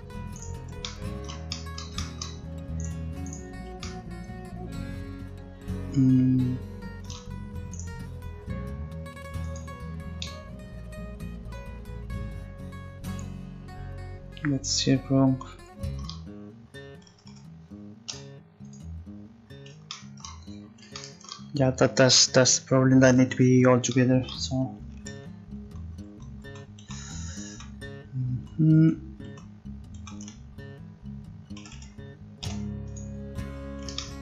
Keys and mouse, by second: 0.9-3.9 middle drag, 7.7-9.4 right drag, 9.6-11.2 drag, 17.3 a, 18.1 u, 25.2 ctrl+z, 25.6 ctrl+z, 26.1 ctrl+z, 26.5 ctrl+z, 26.8 ctrl+z, 27.5 ctrl+z, 28.3 ctrl+z, 28.8 ctrl+z, 29.3 ctrl+z, 30.0 ctrl+z, 31.6 a, 31.7 a, 31.7 a, 32.5 i.